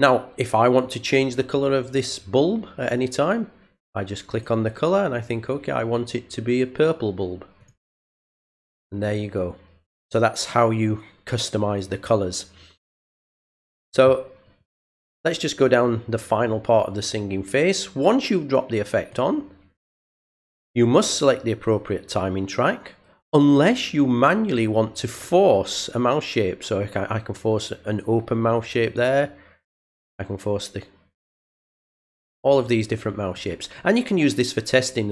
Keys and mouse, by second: 4.3 click, 6.7 click, 7.6 click, 18.9 click, 25.1 click, 28.8 click, 30.0 click, 31.3 click, 32.2 click, 33.3 click, 34.1 click.